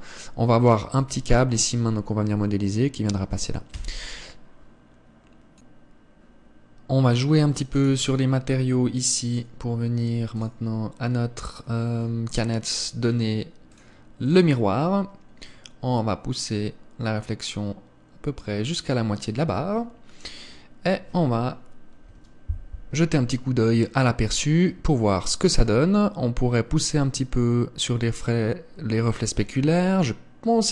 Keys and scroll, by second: 4.3 Escape.